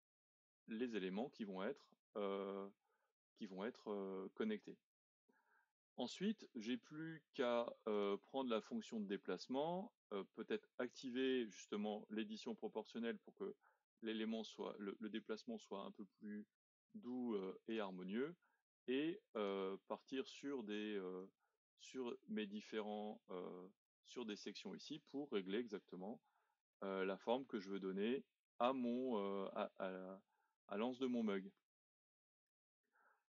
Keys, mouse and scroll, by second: 0.3-0.7 scroll down 3, 0.7-3.5 middle drag, 3.5-3.9 scroll up 1, 3.9-7.9 middle drag, 7.9 click, 8.6-10.9 middle drag, 10.9 click, 12.9 click, 18.2-19.3 middle drag, 19.3 alt+click, 20.0-21.2 middle drag, 21.2 click, 24.9-26.1 middle drag, 26.1 scroll down 2, 26.7-28.0 middle drag, 28.0 scroll up 2, 28.6-33.3 middle drag.